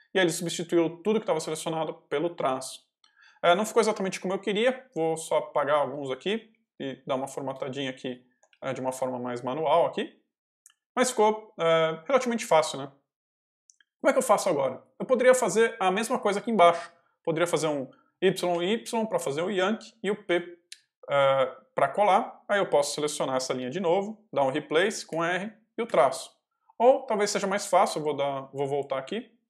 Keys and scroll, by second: 4.7 x, 6.4 i, 6.6 space, 8.2 Escape, 8.4 l, 8.8 x, 15.8 j, 18.1 y, 20.2 p, 23.5 shift+v, 25.0 r, 25.8 -, 27.8 Escape, 28.0 u.